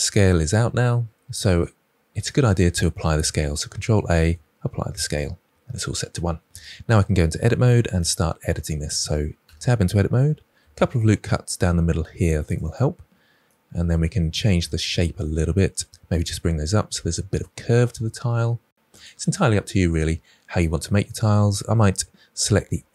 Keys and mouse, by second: 3.6 ctrl+a, 9.3 Tab, 10.3 ctrl+r, 12.4 click, 12.5 click, 13.4 middle click, 15.8 g, 18.8 click, 22.4 2.